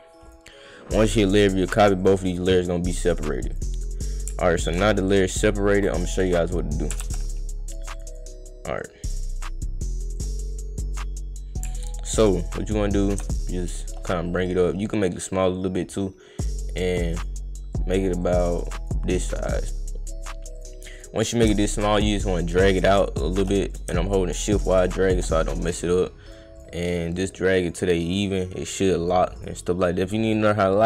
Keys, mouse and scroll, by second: 0.3 click, 1.2 click, 2.0 click, 3.5 click, 4.6 ctrl+click, 7.0 ctrl+z, 7.7 click, 7.9 click, 8.1 click, 8.8 click, 10.2 click, 10.5 click, 12.3 ctrl+click, 13.1 click, 13.3 shift+click, 15.3 click, 15.9-17.2 drag, 17.8 click, 18.2 click, 19.5 click, 20.6 click, 20.9 click, 21.3 click, 21.6-23.4 shift+drag, 23.7 click, 24.1-25.2 shift+drag, 25.4 click, 26.6 click, 26.9 click, 27.2 click, 28.3 click, 28.6 click, 29.4 click, 29.8 click, 30.3 click.